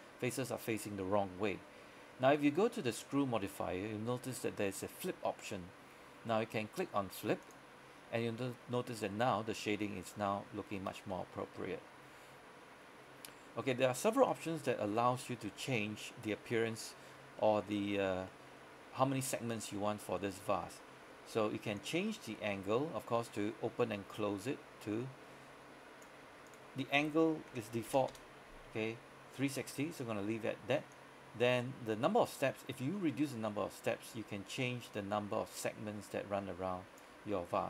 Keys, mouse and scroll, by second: 7.5 click, 8.3-13.8 middle drag, 16.4 scroll up 1, 16.6 middle click, 17.2 scroll up 1, 17.5 middle click, 20.2 scroll down 1, 20.4 middle click, 21.8-27.6 drag, 27.6 KP_3, 27.8 KP_6, 27.9 KP_0, 28.2 KP_Enter, 31.0-37.6 drag.